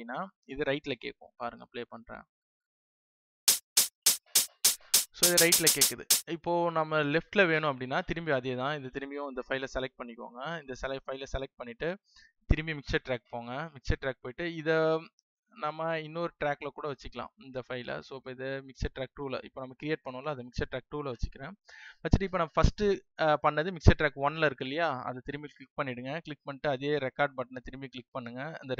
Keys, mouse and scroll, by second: 7.1 space, 8.9 click.